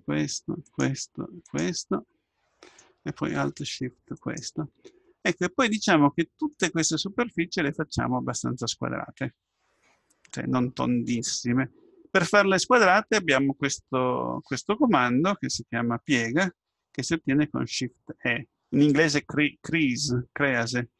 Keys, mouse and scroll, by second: 1.9-3.1 middle drag, 3.1 click, 3.3 middle click, 4.2-6.1 right drag, 5.1-6.1 drag, 6.1 middle click, 8.6-14.5 middle drag.